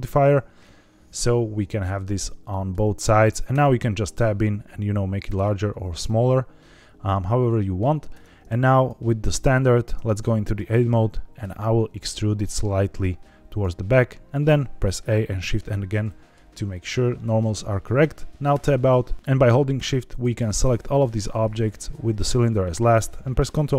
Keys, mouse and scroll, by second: 1.1-2.7 middle drag, 3.4 Tab, 4.1 s, 5.9 click, 8.1 Tab, 8.7 click, 9.8 Tab, 10.1 middle click, 10.7 a, 11.3 e, 13.4 click, 14.4 a, 15.3 shift+n, 15.8 middle click, 18.4 Tab, 20.0 shift+click, 21.6 shift+click.